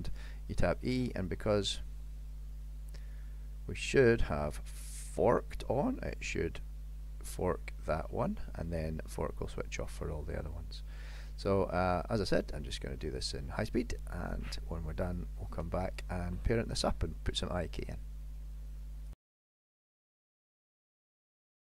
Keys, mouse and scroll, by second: 1.0 e, 5.3 click, 19.2 scroll up 3, 19.3 click, 19.6 middle click, 19.8 click, 19.9 KP_7, 20.2 g, 20.3 shift+middle click, 20.5 e, 20.9 KP_1, 21.3 click, 21.5 click.